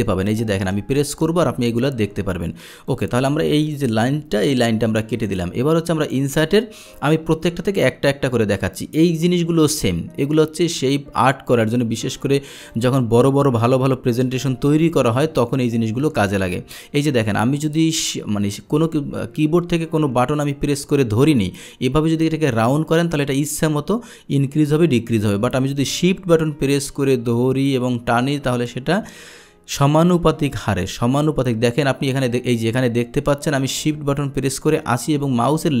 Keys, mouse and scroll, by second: 3.0 click, 3.5 click, 4.4 Delete, 4.4 click, 5.2 click, 6.2 click, 12.0 click, 12.8-35.8 drag.